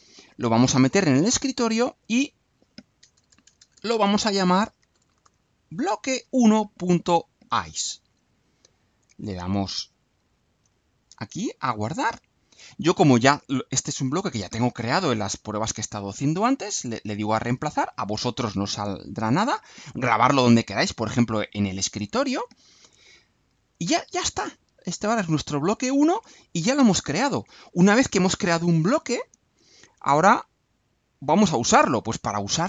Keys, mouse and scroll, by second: 2.1 click, 3.0 BackSpace, 4.6-6.1 typing, 9.5 click, 10.6 alt+click, 12.1 click, 17.5 click, 23.7-24.7 drag.